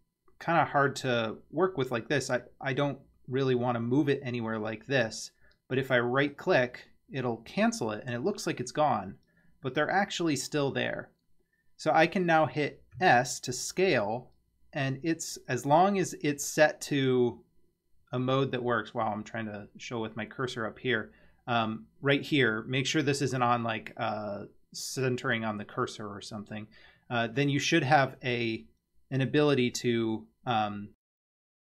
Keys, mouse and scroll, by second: 13.0 s.